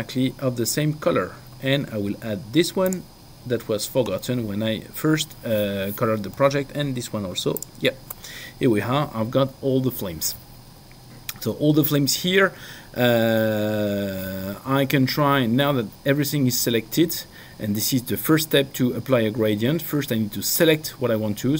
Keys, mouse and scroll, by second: 2.9 ctrl+click, 8.0 ctrl+click.